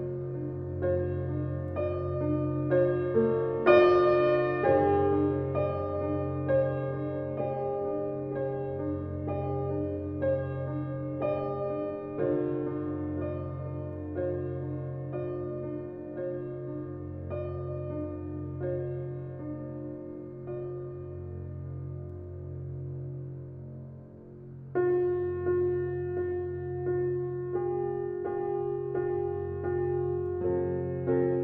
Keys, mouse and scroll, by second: 0.0-0.6 scroll down 8, 0.6-1.8 middle drag, 1.8 click, 2.0-2.7 scroll up 12, 2.7-3.7 middle drag, 3.7 click, 4.0 scroll down 3, 4.2-4.6 middle drag, 4.6 scroll down 1, 4.7-5.5 middle drag, 5.5 click, 5.7 scroll down 5, 6.1-6.5 middle drag, 6.5 click, 7.6-8.7 middle drag, 8.7 shift+a, 10.6 g, 11.6 s, 12.7 alt+middle click, 13.0-13.5 shift+middle drag, 13.5 g, 14.3 h, 15.0 ctrl+z, 15.2 g, 16.5-17.0 middle drag, 17.0 scroll up 1, 17.2-17.8 shift+middle drag, 17.8 s, 18.6 s, 20.2 g, 21.1-22.3 middle drag, 22.3 g, 23.7 click, 24.2 click, 24.9 click, 25.8 scroll up 1, 26.0-26.4 middle drag, 26.4-27.3 scroll up 2, 26.7 shift+middle drag, 27.4 Tab, 28.1 ctrl+r, 30.9 alt+z.